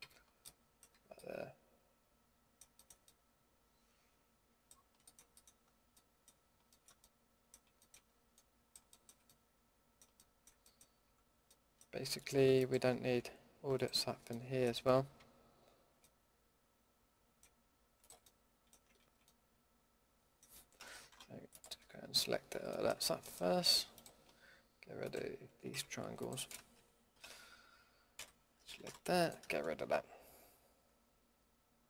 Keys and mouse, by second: 0.0 a, 0.9 Tab, 5.9 click, 5.9 middle drag, 6.1 click, 6.1 middle click, 6.2 click, 6.7 middle drag, 7.0 middle drag, 7.3-9.4 middle drag, 9.8-11.0 middle drag, 11.0 Tab, 14.2 click, 17.1-18.0 middle drag, 19.0 ctrl+z, 21.1 Delete, 25.7 Delete, 28.2 l, 28.8 Delete.